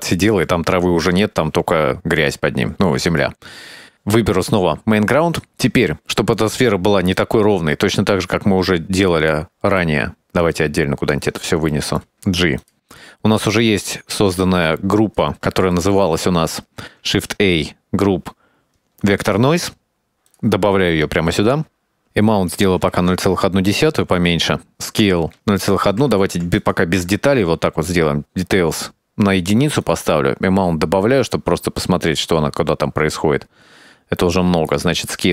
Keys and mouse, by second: 1.3 middle click, 5.4 middle click, 6.4 middle click, 7.8-9.5 drag, 9.8 middle click, 10.4 click, 10.8 middle click, 11.1-11.5 drag, 11.7 shift+click, 12.1 g, 13.0 click, 13.4 click, 14.4 click, 14.7 click, 16.0 middle click, 17.0 shift+a, 21.5 middle click, 22.1-23.9 drag, 24.7-27.5 drag, 30.0-35.3 drag.